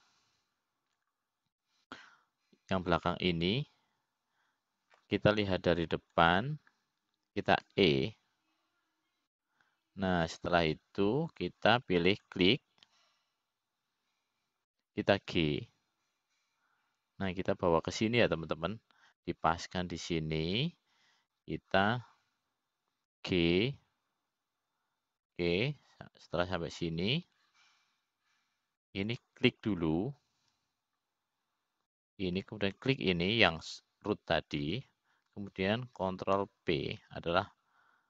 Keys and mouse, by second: 3.6-4.8 drag, 6.1-7.6 middle drag, 10.4 e, 14.8-16.5 drag, 18.1 g, 22.3-25.0 drag, 26.0 g, 31.8-33.6 drag, 35.3-37.3 shift+drag.